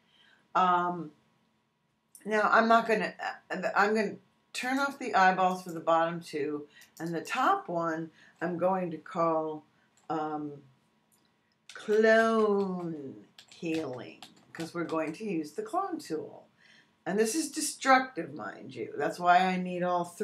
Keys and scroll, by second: 11.4-15.3 typing.